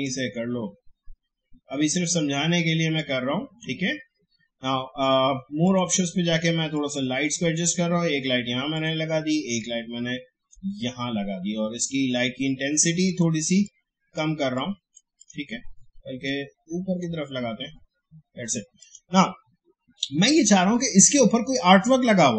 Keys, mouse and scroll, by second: 13.0-18.8 drag.